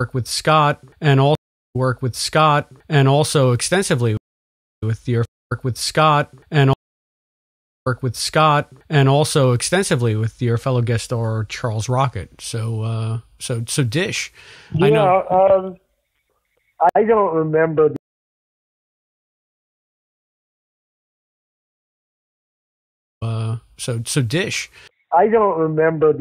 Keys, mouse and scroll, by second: 1.3 space, 1.6 click, 1.7 space, 4.1 space, 4.6 click, 4.7 space, 5.2 space, 5.3 click, 5.4 space, 6.6 space, 7.2 ctrl+z, 7.6 click, 7.8 space, 15.7 click, 16.8 Delete, 17.7 click, 17.9 space, 18.6 click, 19.4 Delete, 20.2 click, 21.3-22.3 drag, 23.0 click, 23.1 space, 23.8 click, 25.4 click.